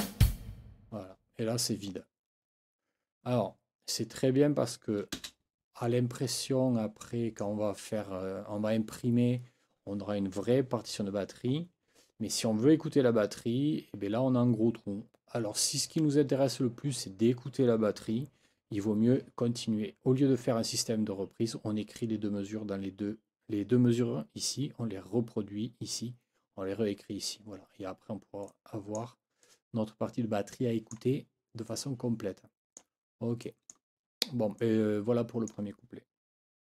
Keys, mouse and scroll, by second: 5.1 space, 6.3-7.6 drag, 28.5 click, 29.4 click, 30.8 click, 31.7-33.0 drag, 33.4 click, 34.6 click.